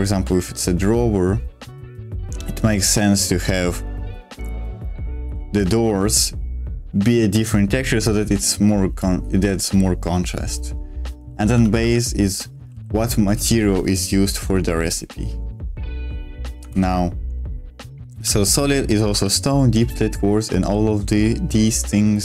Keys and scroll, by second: 11.4-13.4 typing, 16.7 ctrl+o, 18.2 j, 19.2-20.6 j, 21.0 k.